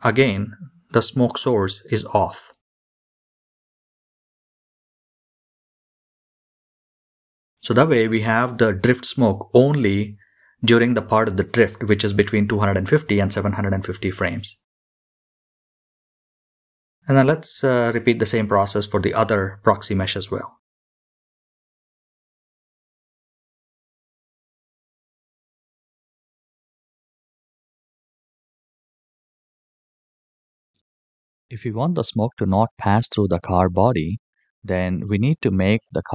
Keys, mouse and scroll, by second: 0.6-4.0 drag, 6.5 click, 10.4 click, 13.2-15.0 scroll up 2, 15.0-17.6 middle drag, 18.1-19.8 scroll up 12, 20.7 click, 21.1 middle click, 21.4 middle drag, 21.7 click, 21.8 click, 22.2 KP_Decimal, 22.3 scroll down 3, 22.5 middle click, 22.6 middle click, 23.0 click, 23.6 click, 23.8 i, 24.1 click, 24.2 click, 24.7 click, 24.8 i, 25.1 click, 25.9 click, 26.0 i, 26.4 click, 26.8 click, 27.5 KP_0, 27.7 click, 28.2 click, 28.4 middle click, 28.6-29.1 scroll up 3, 28.7 click, 29.0 click, 29.1-29.4 scroll down 4, 29.2 click, 29.5 click, 29.7 middle click, 30.0 shift+middle click, 30.2-30.7 scroll down 6, 30.3 middle click, 30.5 click.